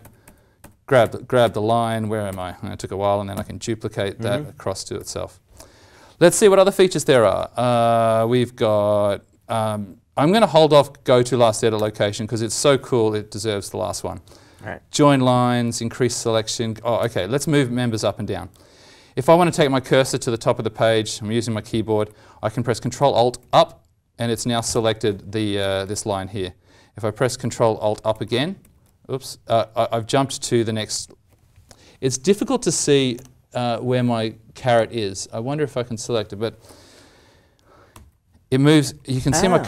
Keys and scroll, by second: 0.0 alt+shift+=, 0.2 alt+shift+=, 0.5 alt+shift+=, 1.0 alt+shift+=, 1.4 alt+shift+=, 2.2 alt+shift+=, 3.3 ctrl+d, 4.9 ctrl+z, 7.2 alt+Tab, 16.9 alt+Tab, 17.0 alt+Tab, 23.4 ctrl+alt+Up, 28.1 ctrl+alt+Up, 37.9 ctrl+alt+Down, 38.8 ctrl+alt+Up, 39.6 ctrl+alt+Down.